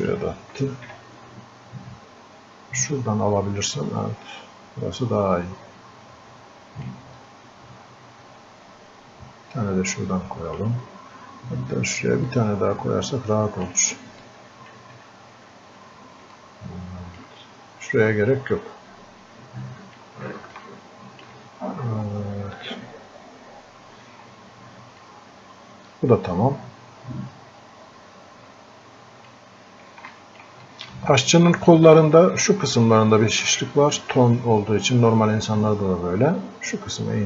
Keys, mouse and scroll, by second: 0.6 ctrl+z, 2.9-14.3 drag, 14.3 click, 15.1 scroll up 1, 16.4-18.5 alt+drag, 18.5-20.6 drag, 20.6-23.9 alt+drag, 24.3 scroll up 1, 25.0-30.2 drag, 30.7 click.